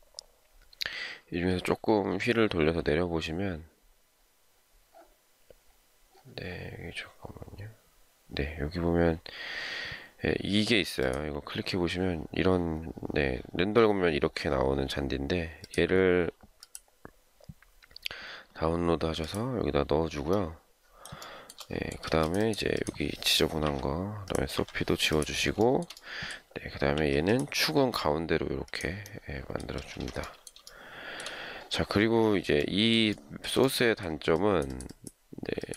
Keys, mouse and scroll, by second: 21.2 shift+middle click, 22.0 space, 23.6 Delete, 24.6 Delete, 25.6 shift+middle click, 26.9 m, 29.7 space, 29.9 Escape, 30.6 shift+scroll up 1, 30.7 shift+scroll down 1, 33.1 shift+middle click.